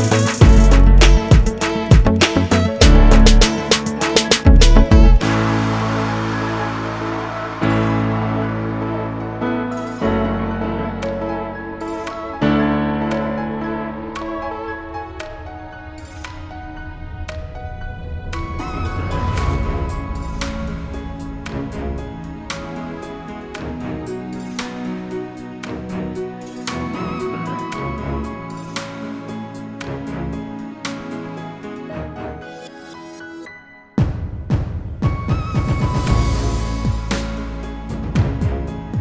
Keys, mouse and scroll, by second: 1.3 scroll up 1, 2.3 ctrl+click, 5.4 F8, 7.9 click, 8.8 ctrl+z, 9.6 scroll down 1, 10.7-11.1 scroll up 1, 14.4 click, 15.1 scroll up 1, 17.7 click, 18.8 scroll down 1, 21.1 scroll up 1, 21.8 double click, 23.4 click, 23.8 double click, 24.2 scroll down 1, 24.7 click, 25.1-25.5 scroll down 1, 25.5-25.9 scroll up 1, 28.7 F4, 29.9 click, 30.9 click, 33.4 click, 35.6-36.1 scroll down 1, 36.8 scroll down 1, 38.0 click.